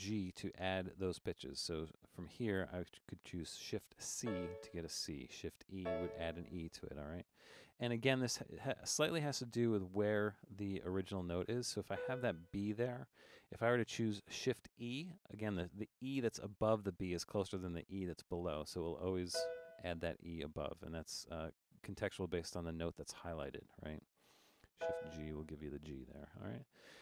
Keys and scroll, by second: 4.2 shift+c, 5.8 shift+e, 8.6 Down, 8.8 Down, 9.3 Down, 12.0 b, 19.3 shift+e, 24.8 shift+g.